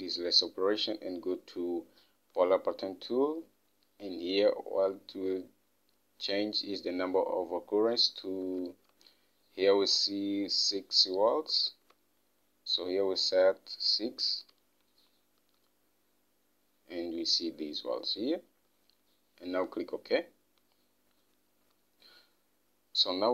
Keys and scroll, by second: 9.0 alt+Tab, 14.9 6, 22.0 Home.